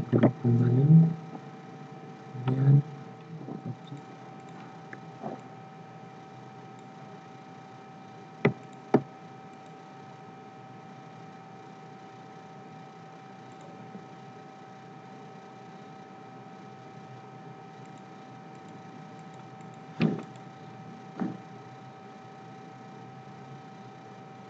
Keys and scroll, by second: 0.1 ctrl+g.